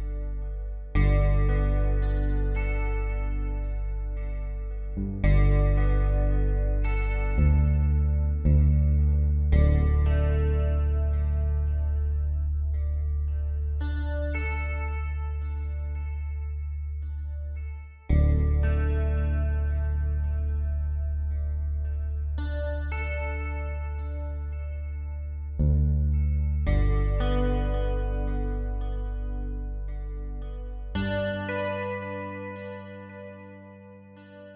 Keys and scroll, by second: 12.3 space, 21.0 b, 29.1-30.2 typing, 34.1-34.5 typing.